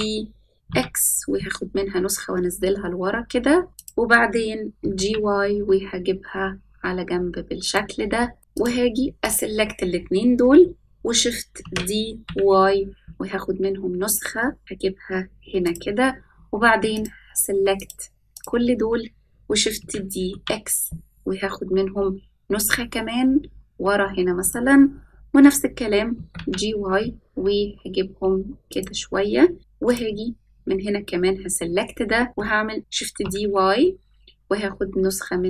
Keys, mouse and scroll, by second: 2.1 s, 4.7 g, 8.3 middle click, 8.4 KP_7, 8.5 click, 9.2 shift+click, 11.6 shift+d, 14.2 s, 16.9 shift+click, 17.7 shift+click, 18.3 shift+click, 19.7 shift+d, 26.1 g, 29.8 click, 32.7 shift+d.